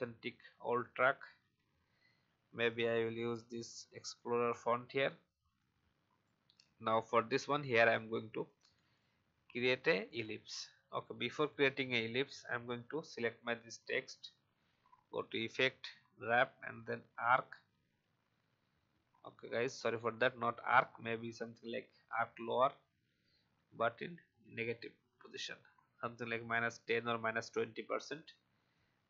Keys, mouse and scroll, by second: 1.0-2.0 typing, 2.6 click, 4.1-7.0 alt+shift+drag, 10.9 click, 12.1 alt+scroll up 1, 14.5 click, 24.2 shift+scroll down 1, 27.6-29.0 drag.